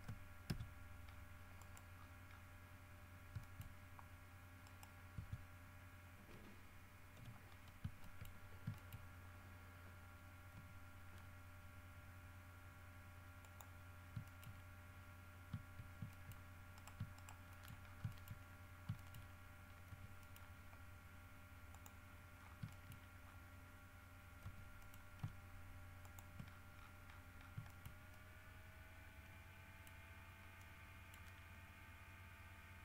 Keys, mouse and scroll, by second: 0.7 ctrl+Tab, 1.3 scroll down 2, 1.8 middle click, 2.1-2.7 scroll down 4, 2.9-3.4 scroll up 4, 3.6 shift+middle click, 4.8 right click, 5.3 Tab, 5.9 scroll up 1, 7.3 l, 7.7 scroll up 1, 8.2 shift+middle click, 8.5-8.9 shift+scroll up 1, 8.9 shift+middle click, 9.4 shift+scroll down 3, 10.7 g, 13.6 middle click, 14.4 shift+middle click, 14.7-15.4 shift+scroll up 3, 15.5 scroll down 1, 16.3 shift+middle click, 16.9 shift+right click, 17.1 shift+middle click, 17.3 shift+middle click, 18.0 shift+scroll down 1, 18.3 shift+middle click, 18.9 shift+scroll down 1, 19.1 shift+middle click, 20.1 g, 20.4 middle click, 21.9 click, 22.2-24.1 scroll up 6, 22.9 shift+middle click, 24.6 g, 25.0 middle click, 26.2 ctrl+middle click, 26.7-27.8 ctrl+scroll down 7, 27.9 shift+scroll up 2, 28.1 shift+scroll down 2, 28.3-30.2 shift+middle drag, 30.3 scroll up 2, 30.7 middle click.